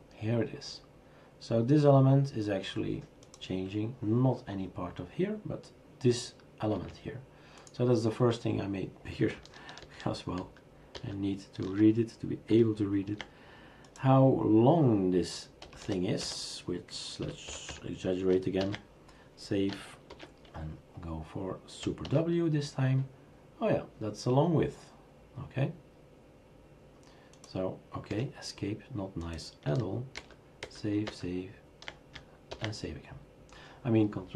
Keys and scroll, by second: 6.7 Escape, 9.8 ctrl+z, 10.4 ctrl+z, 10.9 ctrl+z, 15.6-18.2 typing, 18.6 ctrl+s, 20.1 shift+super+r, 20.5 shift+super+r, 22.0 super+w, 28.1 Escape, 30.2 ctrl+z, 30.6 ctrl+z, 31.1 ctrl+z, 32.5 ctrl+s.